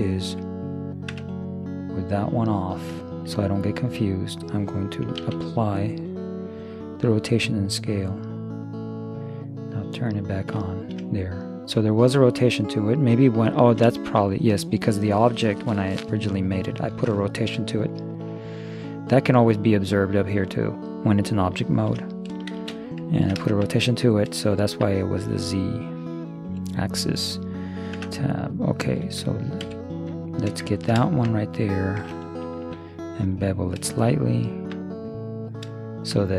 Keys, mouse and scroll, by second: 0.0-1.7 right drag, 0.4 Escape, 1.2 Tab, 2.5-4.2 drag, 3.0-4.5 middle drag, 5.2 ctrl+a, 10.0-16.0 middle drag, 18.8-20.6 middle drag, 22.6 shift+space, 25.6 middle click, 25.8 middle click, 28.0 Tab, 28.2 middle click, 29.7 super+Tab, 30.3-32.0 right drag, 30.8-32.2 drag, 32.6 ctrl+b, 34.9-36.3 middle drag.